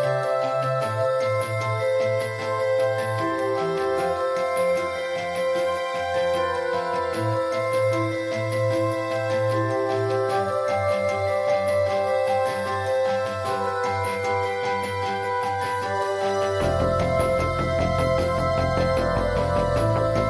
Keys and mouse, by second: 3.4 middle click, 6.6 ctrl+s, 6.7 middle click, 6.9 drag, 7.1-9.0 drag, 8.7 ctrl+s, 9.4 KP_1, 9.7 drag, 10.0 ctrl+s, 11.0 click, 11.5-12.3 [, 11.8-13.3 drag, 13.3-13.7 middle drag, 13.9 middle drag, 14.1-16.2 drag, 16.2 middle click, 16.5 click, 16.7-17.0 ], 19.5 ctrl+s.